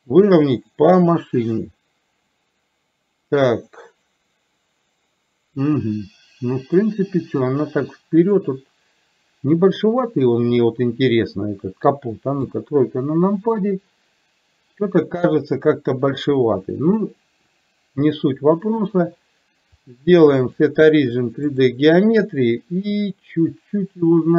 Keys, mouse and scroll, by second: 3.8-12.0 middle drag, 12.6 KP_3, 19.8-21.8 drag, 23.5-24.3 drag.